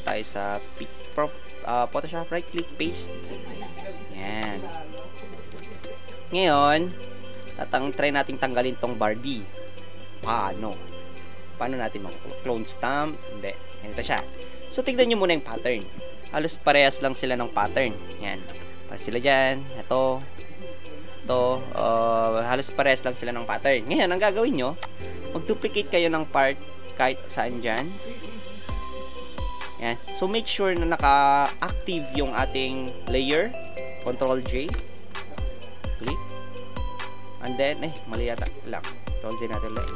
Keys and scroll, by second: 2.5 ctrl+v, 5.7 alt+shift+Return, 14.0 space, 34.6 ctrl+h, 38.4 ctrl+z, 39.8 ctrl+alt+z.